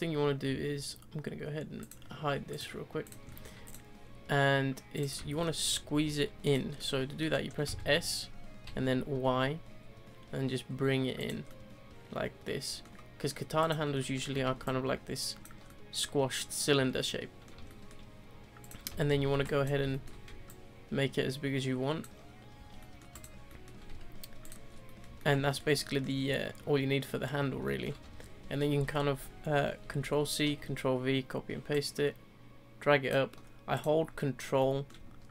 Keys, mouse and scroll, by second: 1.8 click, 2.5-3.0 drag, 3.3-3.6 middle drag, 3.6 click, 4.9 click, 5.3-5.6 shift+middle drag, 5.6-5.9 scroll up 1, 5.9 s, 6.8-7.2 middle drag, 7.2-7.6 scroll down 2, 7.6 s, 11.5-13.6 middle drag, 13.6 click, 14.0-14.6 shift+middle drag, 14.6 ctrl+click, 15.6-16.8 middle drag, 16.8 scroll down 2, 17.0-18.6 middle drag, 18.6 click, 18.9 Tab, 19.1 z, 19.3 3, 19.4 drag, 19.9-20.4 shift+middle drag, 20.4 ctrl+click, 22.6 z, 22.8-23.1 middle drag, 23.1 click, 23.5-23.9 middle drag, 23.9 3, 24.4 click, 24.7 scroll down 2, 24.8-26.2 middle drag, 26.2 scroll down 2, 27.6-28.0 shift+middle drag, 28.0 Tab, 28.9-29.8 scroll up 1, 29.8 ctrl+c, 30.4 ctrl+v, 31.7 ctrl+click, 33.7 click, 34.6-35.3 middle drag.